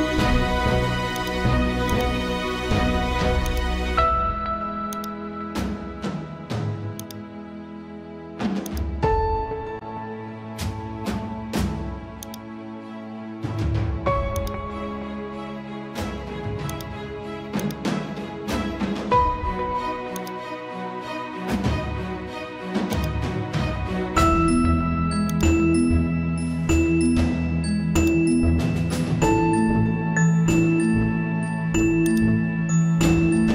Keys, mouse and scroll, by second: 1.1-13.9 drag, 13.9 ctrl+t, 14.3 click, 15.1 right click, 16.7-32.0 drag, 32.1-33.5 drag.